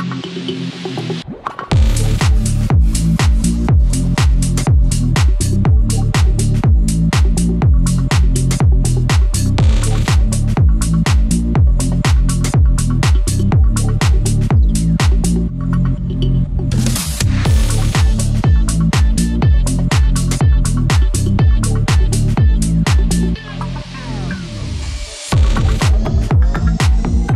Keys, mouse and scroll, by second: 0.7-6.5 drag, 6.6-14.2 drag, 17.4-25.6 drag, 26.8 click.